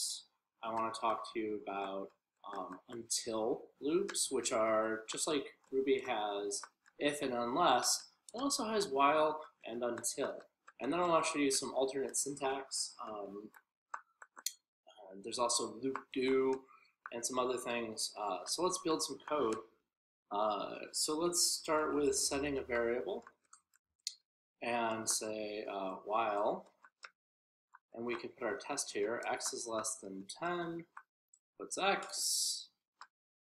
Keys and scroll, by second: 0.0-10.7 typing, 13.8-23.0 typing, 24.4 w, 25.1 a, 27.1 typing, 30.2 p.